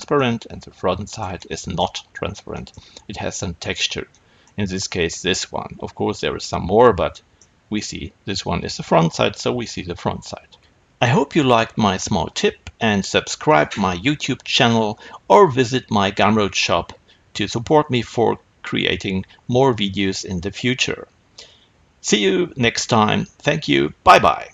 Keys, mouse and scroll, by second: 2.0-2.4 scroll down 2.